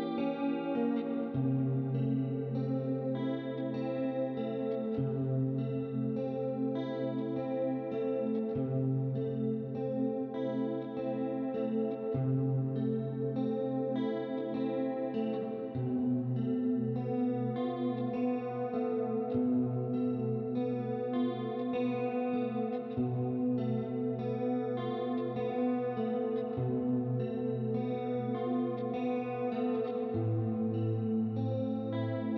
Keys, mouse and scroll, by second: 0.3 right click, 1.7 click, 2.8 click, 4.8 click, 6.2 click, 7.0 shift+click, 7.8 click, 9.0 click, 9.8 click, 11.5 click, 12.3 ctrl+d, 12.8 click, 14.5 middle click, 15.5 click, 17.1 click, 22.8 Escape, 23.5 ctrl+z, 24.1 ctrl+z, 27.1 click, 29.7 click, 31.2 ctrl+z, 31.9 click.